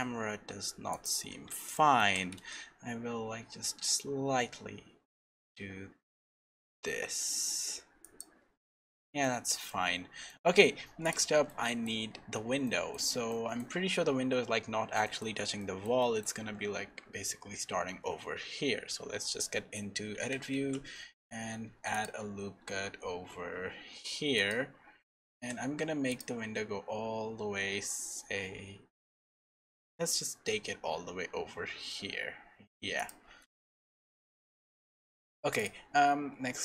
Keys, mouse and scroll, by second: 1.7 middle click, 2.1 r, 9.2 middle click, 9.9-10.6 scroll up 3, 10.3 middle click, 11.0 click, 11.5 middle click, 13.3 middle click, 16.4-18.4 scroll up 3, 18.4 Tab, 20.2 alt+a, 20.5 ctrl+r, 25.3 ctrl+r, 35.6 click, 36.1 Tab.